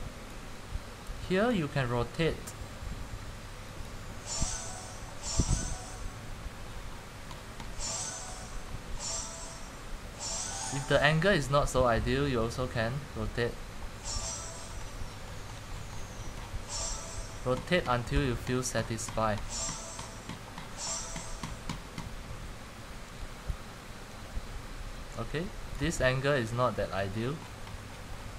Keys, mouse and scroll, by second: 0.4-6.0 drag, 6.0-7.5 scroll down 12, 7.5-8.0 scroll up 18, 8.5 scroll, 8.7 scroll down 3, 10.1-10.9 scroll down 1, 14.4-14.9 scroll down 12, 17.8 scroll down 10, 19.3-19.7 scroll up 10, 25.9 click, 26.7 click, 27.1 scroll down 10.